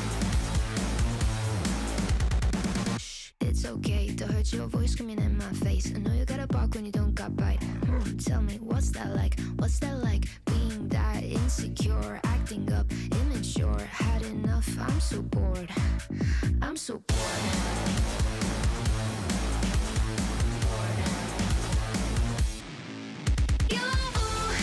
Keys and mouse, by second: 1.2 z, 1.5 z, 3.3 g, 4.4 middle drag, 4.5-5.4 drag, 6.4 KP_7, 8.2 middle drag, 8.7-9.0 drag, 9.3 F3, 12.1 KP_7, 13.0 s, 13.6 s, 14.3 g, 15.6-18.6 typing, 19.7 s, 20.8-22.6 typing, 23.2-23.8 drag, 24.3 g.